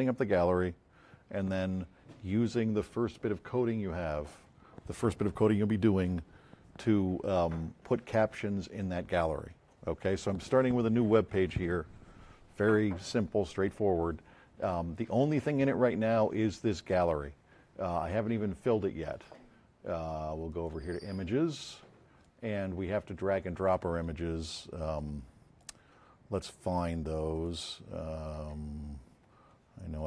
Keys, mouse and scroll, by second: 9.5 F7, 21.7-22.3 drag, 24.9 click, 27.3 click.